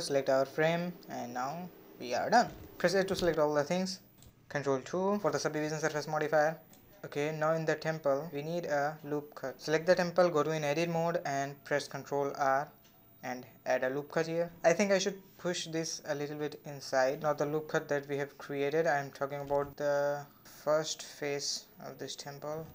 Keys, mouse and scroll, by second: 0.0 click, 1.4 click, 1.8 scroll down 4, 2.1-2.6 middle drag, 2.6 a, 3.2-4.9 middle drag, 4.9 ctrl+2, 6.3-7.1 middle drag, 7.1 Tab, 8.0 click, 8.6-8.9 scroll up 1, 8.9 shift+middle click, 9.2-10.2 scroll up 3, 10.4 ctrl+r, 13.5-14.6 middle drag, 14.6-15.3 scroll down 1, 15.3-17.6 shift+middle drag, 17.6-18.3 scroll up 5, 18.3-20.1 middle drag, 20.1-20.6 scroll up 4, 20.6 middle click, 21.5 z.